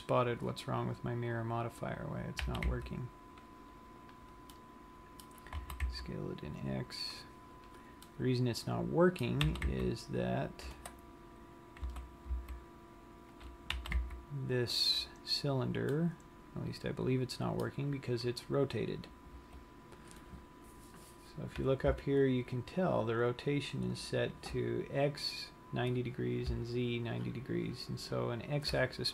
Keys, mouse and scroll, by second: 1.1-2.1 scroll up 6, 2.1 scroll down 1, 2.7 g, 4.3 click, 4.6 middle click, 6.0 s, 7.8 click, 8.3 middle click, 9.8 g, 12.1 s, 13.7 click, 14.0 g, 15.2 click, 15.7 scroll down 1, 16.2 middle click, 19.6 Tab.